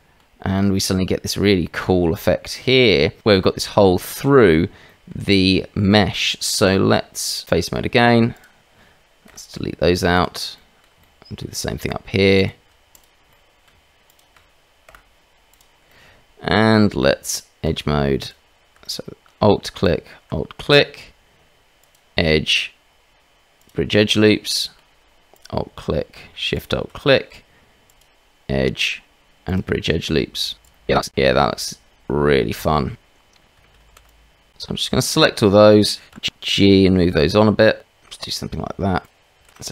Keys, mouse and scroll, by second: 0.5 shift+middle click, 1.5-3.2 shift+middle drag, 3.9 middle click, 4.8 middle click, 5.3 shift+middle click, 6.1 shift+middle click, 6.8 Tab, 7.5 middle click, 8.3 shift+middle click, 9.2 Delete, 10.6 click, 11.0 shift+click, 11.6 click, 12.9 click, 13.3 middle click, 14.8 Delete, 15.9 click, 16.7 Tab, 18.2 alt+click, 18.8 click, 19.7 alt+shift+click, 21.8-23.7 drag, 24.3 click, 25.0 alt+click, 25.7 middle click, 27.8-29.6 drag, 30.4 Tab, 30.9 drag, 33.5 Tab, 33.9 shift+z, 36.2 g, 39.4 shift+z.